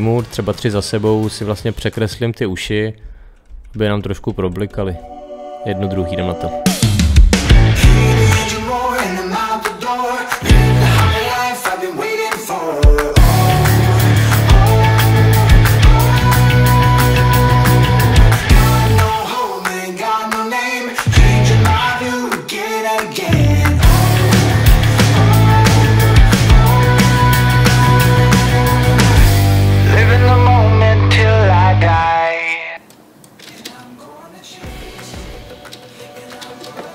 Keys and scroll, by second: 2.4 Page_Down, 3.3 Page_Up, 4.5 Page_Down, 9.5 Page_Down, 11.3 Page_Down, 11.5 Page_Up, 11.7 Page_Down, 14.0 Page_Up, 14.2 Page_Down, 14.6 Page_Down, 16.2 Page_Down, 17.6 Page_Down, 19.1 Page_Up, 19.3 Page_Down, 19.8 Page_Down, 22.2 Page_Down, 24.6 Page_Up, 24.8 Page_Down, 25.0 Page_Up, 25.1 Page_Down, 26.8 Page_Up, 27.8 space, 28.3 Page_Down, 30.3 Page_Up, 30.4 Page_Down, 32.3 Page_Up.